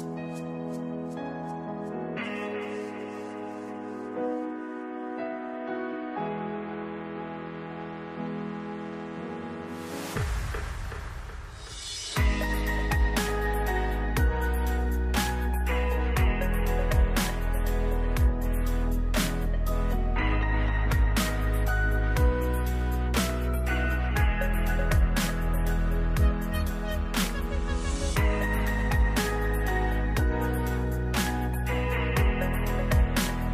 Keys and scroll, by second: 9.0 ctrl+s, 11.2 ctrl+d, 20.2 n, 20.3 space, 20.9 BackSpace, 21.2 g, 21.3 Return.